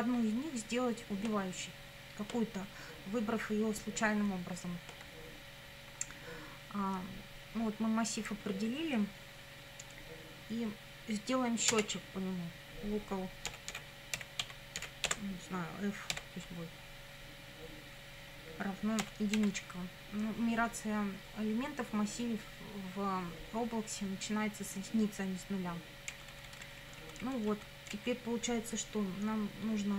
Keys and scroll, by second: 11.7 Return, 13.3-16.1 typing, 19.0 =, 19.4 1, 26.1 Down.